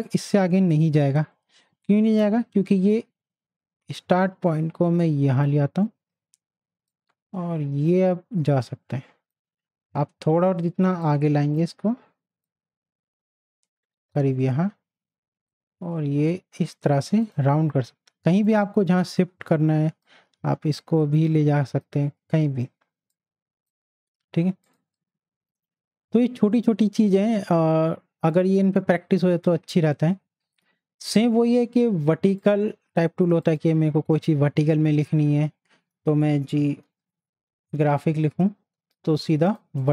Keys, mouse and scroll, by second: 2.9-24.6 drag, 28.3 click, 28.3 right click, 32.4 right click, 32.4 click, 36.0 click, 36.1-38.2 typing, 39.4 click.